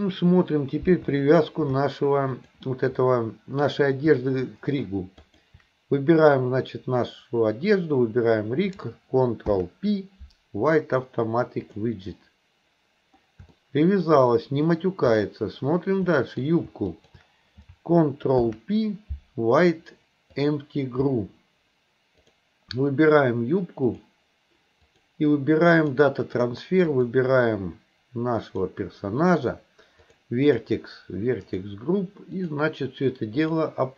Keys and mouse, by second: 1.2-1.6 shift+middle drag, 2.4 click, 5.2 shift+click, 9.5 ctrl+p, 13.6-14.1 shift+middle drag, 16.1 middle click, 16.9 shift+click, 18.4 ctrl+p, 22.2 click, 23.9 click, 24.9-26.0 drag, 26.9 click, 30.1 click, 30.4 click, 31.6 click, 32.5-33.6 drag.